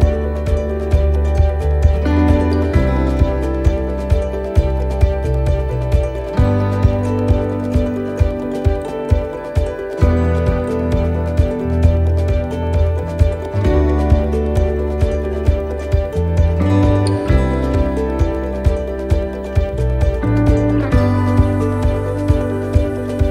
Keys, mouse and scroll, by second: 0.4 middle click, 1.4 right click, 2.0 shift+middle click, 2.4 middle click, 3.4 shift+right click, 4.5 click, 7.0 right click, 8.3 shift+right click, 9.5 click, 11.7 middle click, 12.3 scroll up 1, 12.6 middle click, 14.1 middle click, 15.0 right click, 16.5 middle click, 17.9 click, 20.8 middle click, 22.0 ctrl+r.